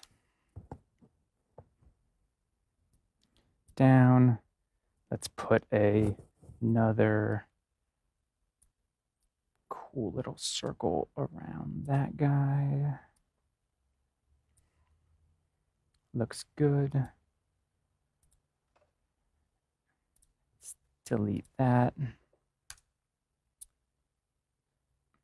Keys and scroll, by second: 22.6 BackSpace.